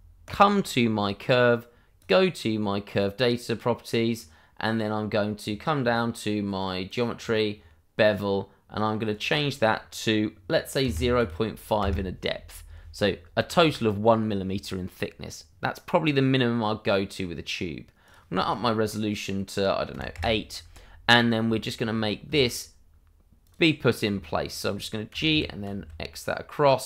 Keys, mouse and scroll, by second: 0.2 click, 5.4-5.8 scroll down 1, 6.8 click, 7.2-9.1 scroll down 1, 9.1 click, 10.8 0, 11.1 5, 11.7 Return, 18.0 click, 19.9 8, 20.1 Return, 21.5 shift+middle click, 21.9-22.3 shift+scroll up 2, 22.3 shift+middle click, 23.4 click, 23.7 scroll down 1, 24.1 shift+middle click, 25.0 g.